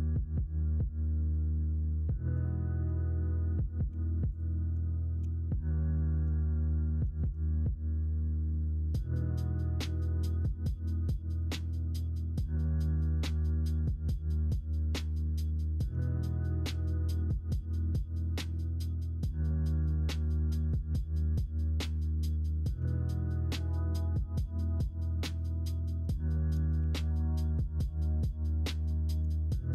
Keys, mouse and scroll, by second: 1.5 middle click, 1.7 Tab, 2.8 Tab, 3.8 2, 5.2 shift+s, 6.4 shift+middle click, 6.7 Tab, 7.2 shift+a, 10.2 Tab, 10.8 Tab, 14.3 middle click, 14.9 middle click, 15.9 Tab, 16.8 middle click, 20.1-21.6 middle drag, 22.7 Tab, 23.7 Tab, 25.2 ctrl+a, 25.8 Tab, 26.8 shift+a, 28.3 middle click, 28.9 click, 29.4 shift+click.